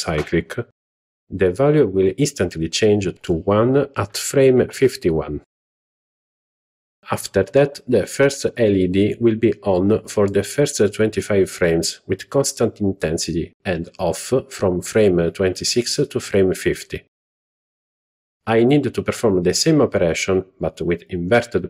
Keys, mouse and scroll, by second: 2.0-6.1 drag, 11.7 z, 14.3 click, 14.9-16.1 drag, 16.6 z, 20.7 click.